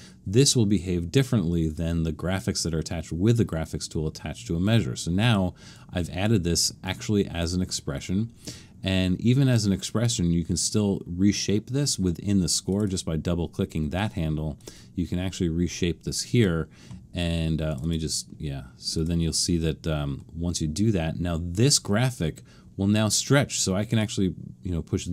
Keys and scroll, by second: 20.2 Escape.